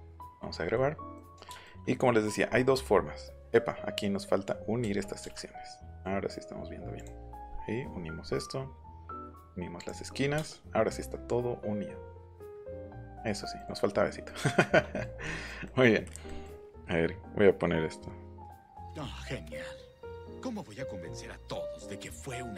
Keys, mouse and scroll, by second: 0.2 ctrl+s, 4.9 ,, 5.2 m, 5.9 click, 6.9 click, 7.7 scroll down 2, 7.9-8.5 scroll up 4, 9.2 click, 9.7 click, 10.0-10.4 scroll up 4, 10.4 space, 10.9-13.2 middle drag, 13.5 middle click, 14.2 middle click.